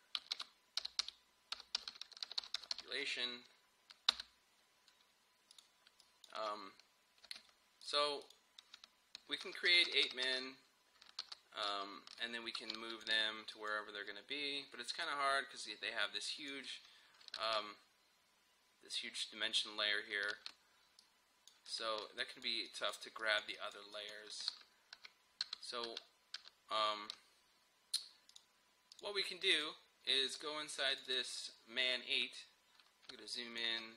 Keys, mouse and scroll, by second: 0.1-3.3 typing, 4.1 Return, 5.5 click, 6.4 space, 7.9 click, 9.5 ctrl+d, 11.2 ctrl+d, 12.6-17.5 drag, 17.5 ctrl+z, 20.2 ctrl+z, 21.0 click, 24.3 click, 24.5 ctrl+z, 28.3 click, 32.1-32.4 scroll up 1, 33.1 space, 33.3 click, 33.6 space.